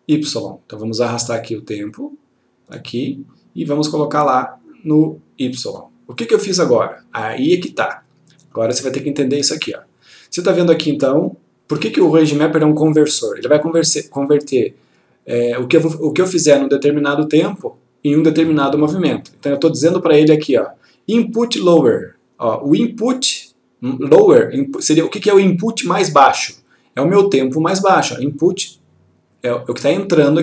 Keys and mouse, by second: 1.5-3.3 click, 7.3-8.8 click.